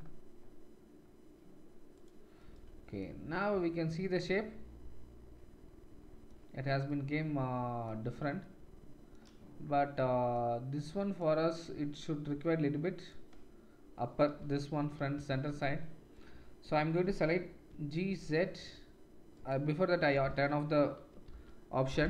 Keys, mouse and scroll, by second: 2.0-11.5 middle drag, 3.5 Tab, 8.0 Tab, 11.5-13.0 drag, 13.0-16.1 middle drag, 14.3 KP_1, 15.2 shift+z, 17.6 g, 20.1 o, 21.2-22.0 drag.